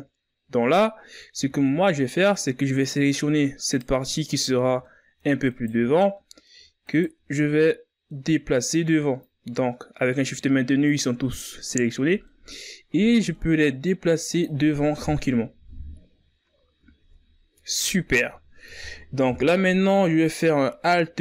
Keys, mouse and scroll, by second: 2.1 scroll down 1, 2.3 middle click, 2.8 z, 3.1 middle click, 3.7-4.3 scroll up 3, 4.3 middle click, 5.1 right click, 5.7 shift+right click, 6.3 middle click, 6.9 shift+right click, 7.6 middle click, 8.3 shift+right click, 8.9-10.6 middle drag, 10.6-13.7 drag, 13.7-15.3 middle drag, 15.3-16.4 drag, 16.4 KP_1, 17.6-18.3 ctrl+scroll up 2, 18.3-19.3 shift+scroll down 3, 19.3-20.1 scroll up 2, 20.1 KP_3.